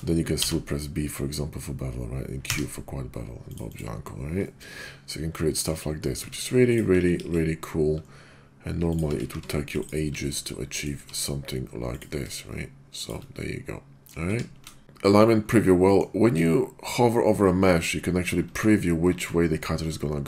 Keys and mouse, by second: 0.4 b, 2.4 q, 3.5 click, 3.7 click, 4.4-5.7 middle drag, 6.1 Tab, 6.6 click, 7.1 ctrl+b, 8.9 click, 9.0 Tab, 9.3 q, 10.3-10.8 middle drag, 11.0 q, 13.0 shift+drag, 13.3-14.1 middle drag, 14.3 q, 14.8 click, 15.9 middle click.